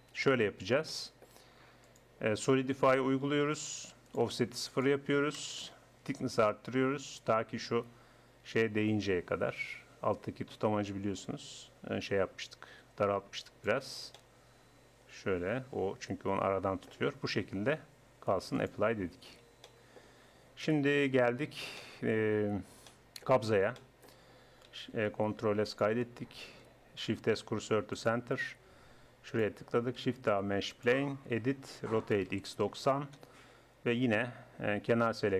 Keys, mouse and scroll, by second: 1.9-3.7 drag, 4.1-6.7 drag, 7.1-8.9 drag, 14.0-16.1 middle drag, 17.1 middle click, 18.6 click, 18.9 Tab, 19.5 Tab, 20.7 KP_1, 25.3 ctrl+s, 27.2 shift+s, 30.1 shift+a, 31.3 Tab, 32.0 r.